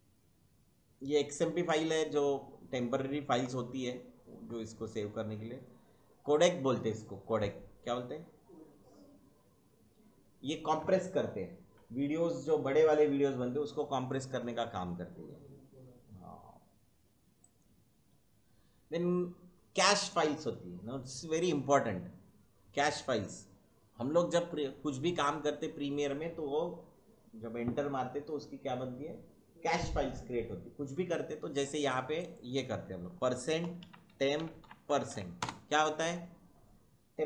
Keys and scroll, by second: 33.2-35.5 typing.